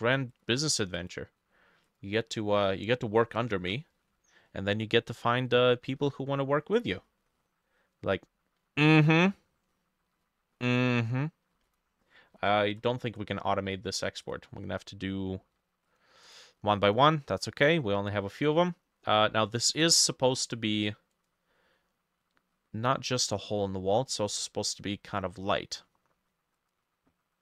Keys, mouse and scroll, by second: 2.7 middle click, 3.5 ctrl+alt+e, 5.1 Escape, 6.0 ctrl+s, 11.7 shift+click, 12.4 ctrl+g, 13.1 right click, 16.3 double click.